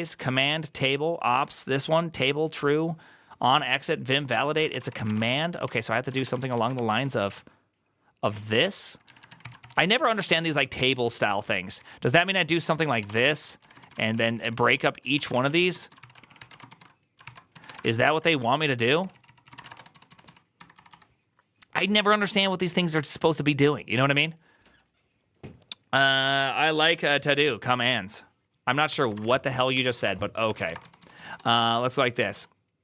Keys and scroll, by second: 0.0-0.4 typing, 4.3-21.2 typing, 18.9 ctrl+c, 28.8-32.8 typing, 29.6 ctrl+c, 29.6 Return.